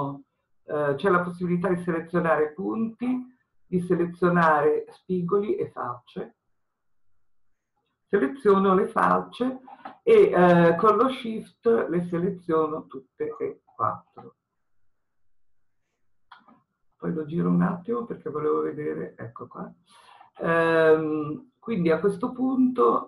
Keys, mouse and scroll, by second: 17.0-23.0 middle drag.